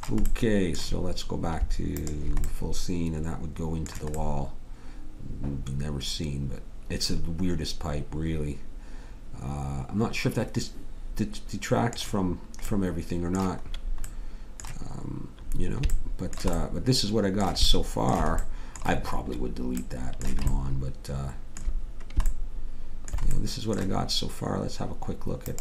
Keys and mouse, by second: 2.0-3.0 middle drag, 3.6-6.0 middle drag, 12.7 middle click, 22.6 middle click, 25.4 click.